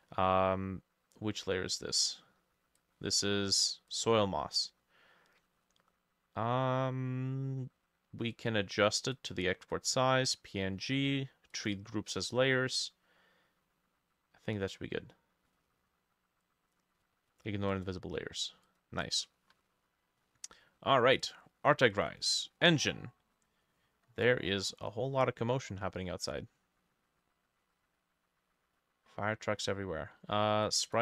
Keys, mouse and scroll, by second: 19.1-21.1 drag, 22.1-24.1 drag, 30.9-31.0 drag.